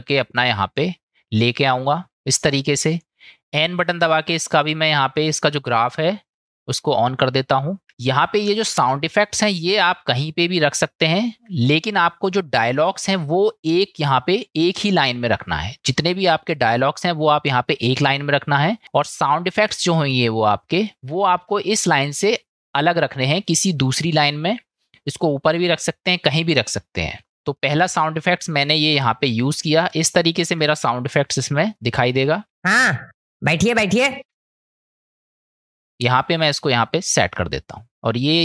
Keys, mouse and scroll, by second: 6.4-10.1 drag, 10.1-11.4 shift+middle drag, 14.1-14.9 drag, 16.4-17.3 drag, 18.0 middle click, 21.0 shift+middle click, 27.5 click, 29.9 shift+middle click, 31.3 click, 31.8 click, 32.5 space, 34.8-35.9 drag, 35.9 click, 37.0 click, 37.9 space.